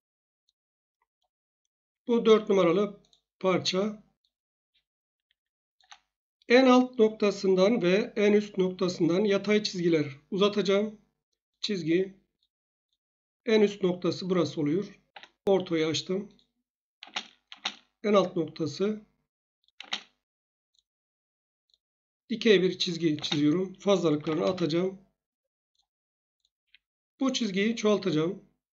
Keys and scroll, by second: 15.1 F8, 17.0 space, 17.5 space, 19.8 space, 23.1-24.8 typing, 26.6 Escape.